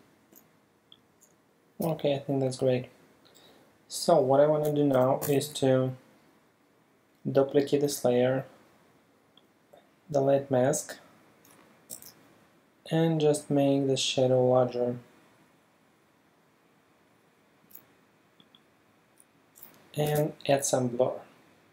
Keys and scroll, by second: 0.0 super+space, 5.3 super+j, 11.9 super+t, 20.1 super+b.